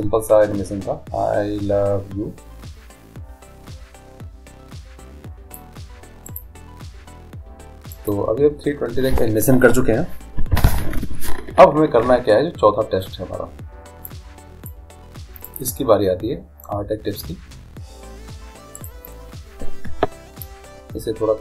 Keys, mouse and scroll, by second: 6.3-8.2 right drag, 8.1-9.7 drag, 14.1-17.3 drag, 18.8-20.6 right drag, 20.5-21.4 drag.